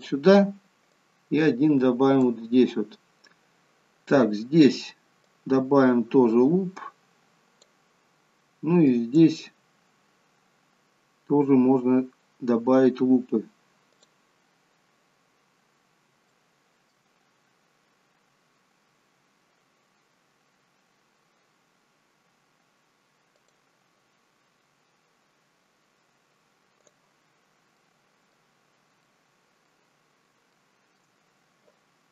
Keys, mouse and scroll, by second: 1.0 click, 5.4 click, 8.9 click, 10.9-12.0 scroll up 2, 14.0 click, 15.5-16.1 scroll down 1, 16.4 shift+middle click, 23.4 click, 26.8 click, 27.4-27.9 scroll down 2, 27.9 middle click, 28.8 scroll up 1, 29.1 middle click, 30.1 scroll down 1, 30.6 shift+middle click.